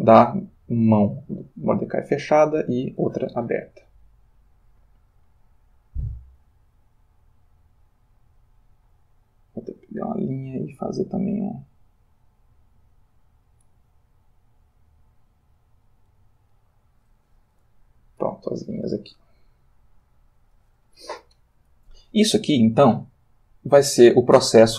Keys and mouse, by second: 1.1 Left, 2.1 Return, 5.6 click, 7.6 click, 8.9 click, 9.8 click, 11.9-13.9 drag, 14.8-16.2 drag, 19.2 Left, 19.9 Return, 20.5 Right, 23.1-24.3 ctrl+middle drag.